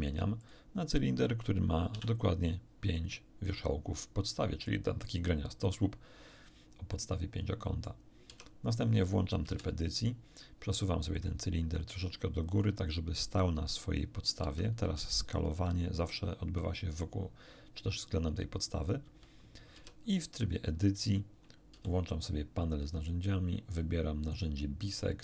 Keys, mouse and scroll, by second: 0.4 click, 1.8 5, 2.9 click, 6.6 scroll down 1, 6.9-8.0 middle drag, 8.2 Tab, 9.4 1, 11.1-12.8 ctrl+drag, 14.4 Tab, 14.8 s, 19.0 Escape, 19.7 Tab, 21.7 t, 23.4-23.8 scroll down 2, 24.0 scroll down 2, 25.0 click.